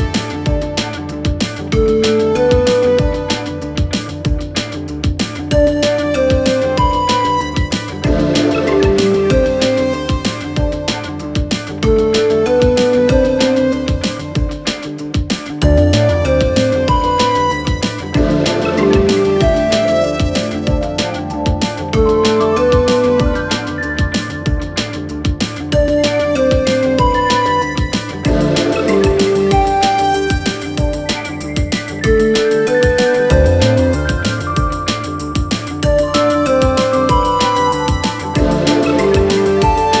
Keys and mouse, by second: 0.8 s, 4.1 ctrl+a, 5.0 Tab, 5.5 2, 6.9 click, 7.4 ctrl+click, 8.6 ctrl+b, 13.6-17.3 drag, 18.1-20.6 drag, 21.4-23.8 drag, 24.4-28.8 middle drag, 29.4 Tab, 29.7 s, 34.0-34.7 drag, 35.1-37.4 middle drag, 38.0 g, 39.2-40.0 middle drag.